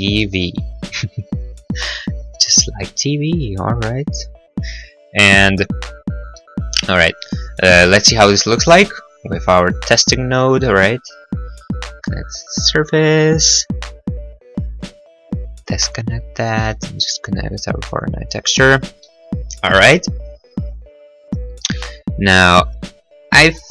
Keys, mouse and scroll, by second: 0.0-0.5 typing, 0.1 middle click, 0.3 middle click, 0.8 middle click, 1.3 middle click, 1.6-2.0 scroll, 2.8 scroll, 3.1 middle click, 5.9-7.0 scroll, 6.8 middle click, 7.0 middle click, 7.9 scroll, 9.1 click, 9.6 click, 15.0 click, 18.8 middle click, 18.9 middle click, 18.9-19.7 scroll, 19.3 middle click, 19.6 middle click, 21.1 click, 21.1-22.6 scroll, 21.3 click, 21.5 click.